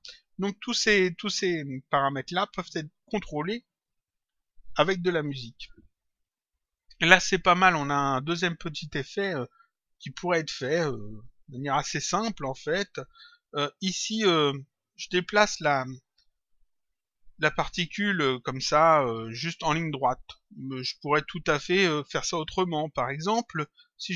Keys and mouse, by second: 3.0 click, 6.1 click, 13.1 click, 20.3 click.